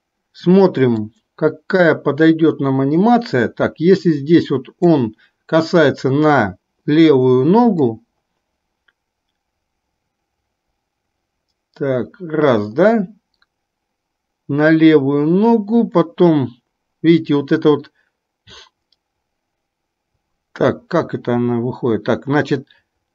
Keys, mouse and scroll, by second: 0.7-23.1 drag.